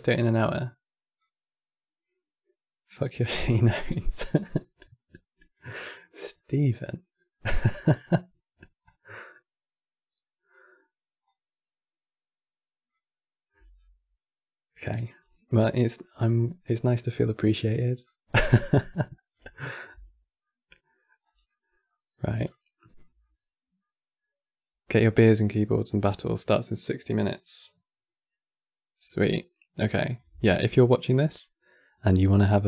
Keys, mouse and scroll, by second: 0.9 click, 5.7-8.5 middle drag, 8.5 click, 10.9 click, 15.0-17.7 middle drag, 17.7 click, 19.3 click, 19.6 x, 20.1 middle click, 20.9 scroll up 3, 21.2 middle click, 21.6-22.2 scroll up 4, 22.2 click, 22.9-25.9 middle drag, 29.8 click, 32.3 shift+d.